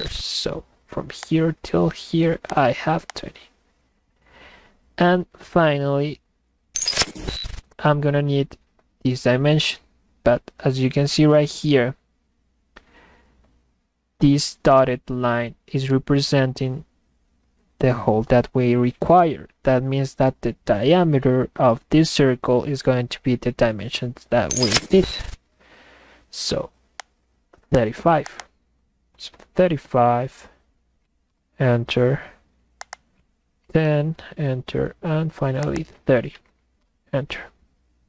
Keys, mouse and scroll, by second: 1.3 click, 2.5 click, 3.1 click, 27.0 click, 27.7 click, 28.3 click, 28.4 click, 32.8 click, 32.9 click, 35.0 scroll up 2, 35.6 click, 35.8 click.